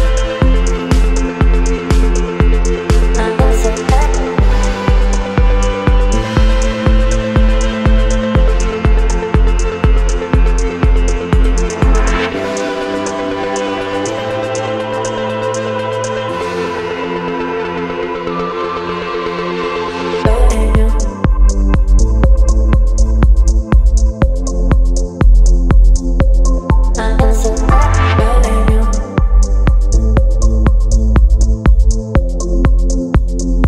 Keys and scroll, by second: 1.9 ctrl+j, 2.5 ctrl+t, 4.0 ctrl+v, 4.2 ctrl+t, 10.4 Right, 11.6 Right, 11.6 Right, 11.7 Right, 12.4 Left, 13.8 Right, 14.2 Right, 14.3 Right, 14.4 Right, 15.4 Return, 18.6 space, 21.1 space.